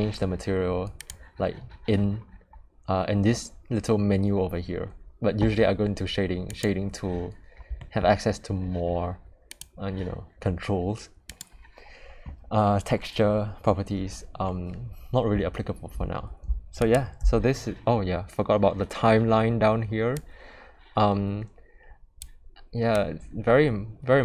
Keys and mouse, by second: 1.0 click, 9.4 click, 16.7 click, 20.1-22.1 drag, 23.0 click.